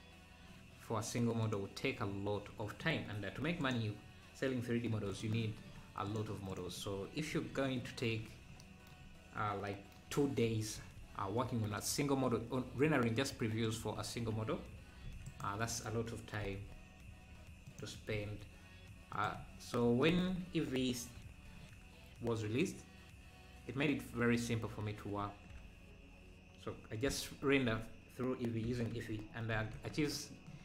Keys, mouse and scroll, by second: 2.0 m, 2.0 `, 3.6-7.3 drag, 7.3 KP_Decimal, 7.6 KP_Decimal, 10.8 e, 15.0 e, 19.4 e, 21.2 ctrl+;, 27.4 ctrl+l, 28.6 r.